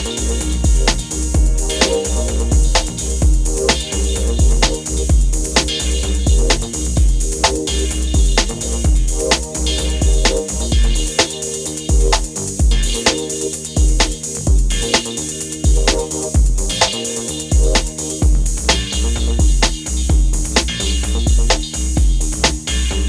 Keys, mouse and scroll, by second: 4.1 click, 12.9 ctrl+a, 14.2 click, 17.6-18.3 drag.